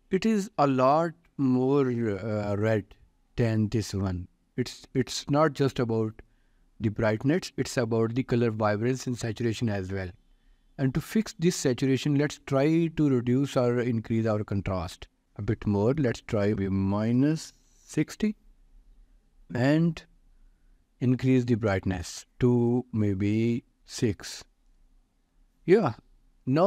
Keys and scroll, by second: 16.5 Return, 16.9-18.2 typing, 23.2 5, 23.7 Return.